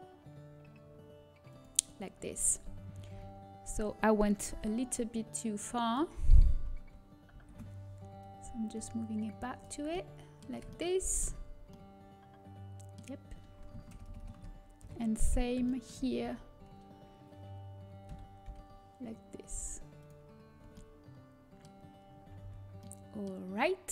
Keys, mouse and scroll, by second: 5.9 z, 5.9 b, 7.6 shift+l, 9.4 click, 9.9-14.8 middle drag, 9.9 z, 13.8 ctrl+KP_Add, 14.8 ctrl+KP_Add, 14.8 KP_7, 15.6 middle click, 16.2 z, 18.3 g, 20.5 z, 23.5 a.